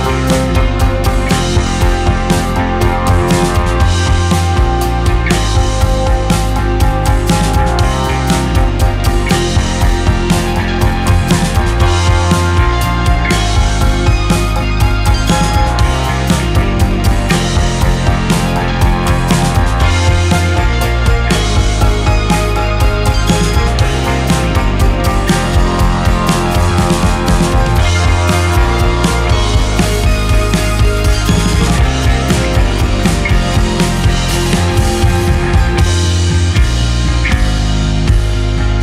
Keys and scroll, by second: 1.6 space, 2.0 shift+q, 10.1 Delete, 10.5 ctrl+z, 13.3 shift+q, 14.0 2.